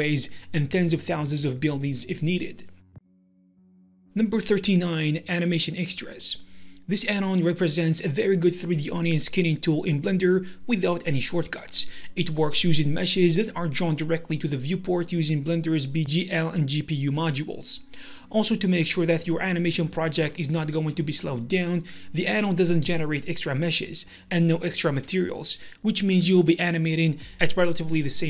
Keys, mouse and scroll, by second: 1.2 middle click, 1.7 ctrl+middle click, 2.3 middle click, 3.3 shift+middle click.